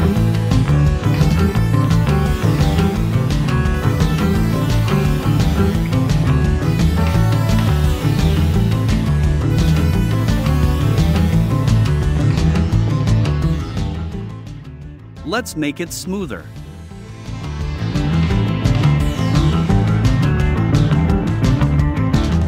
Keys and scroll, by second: 3.8 a, 6.8 super+j, 9.6 i, 10.6 v, 14.5 a.